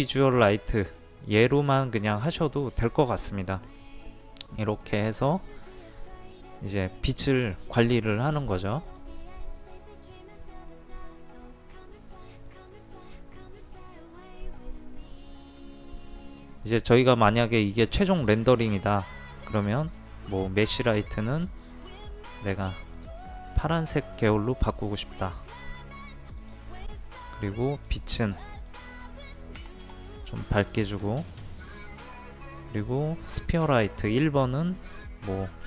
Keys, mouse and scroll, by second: 29.6 KP_5, 32.8-35.6 drag.